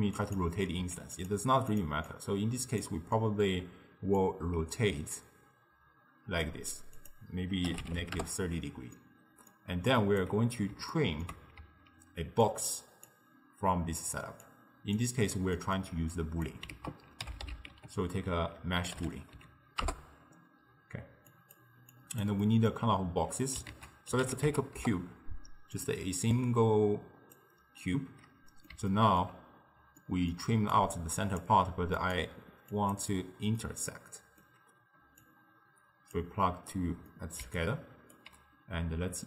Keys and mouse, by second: 0.8 g, 1.8 drag, 2.1 click, 3.2-4.2 middle drag, 4.2-9.0 drag, 9.0-10.0 middle drag, 10.0 click, 11.0-11.7 ctrl+middle drag, 11.7-13.1 d, 12.5 click, 12.8 d, 13.1-14.1 drag, 14.1-14.4 d, 14.5 click, 15.0 d, 15.1 d, 15.6-16.2 middle drag, 16.2 click, 16.8 ctrl+a, 22.0 click, 22.5-23.8 middle drag, 23.8 ctrl+a, 26.4 click, 28.0-30.6 middle drag, 30.6 d, 30.8-31.5 drag, 31.5 d, 32.0-33.6 drag, 33.6-35.3 middle drag, 35.3 click, 37.1-37.5 middle drag, 37.5 d, 37.6 right click, 38.2 d, 38.3 d.